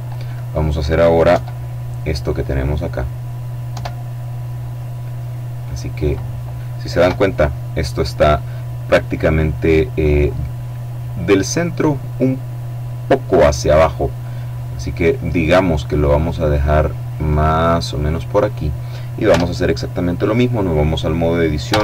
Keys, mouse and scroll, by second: 0.9 KP_7, 3.3 KP_7, 4.3-6.2 middle drag, 6.6 KP_7, 14.0-16.6 middle drag, 16.8-18.2 drag, 18.8 Tab, 21.2 e.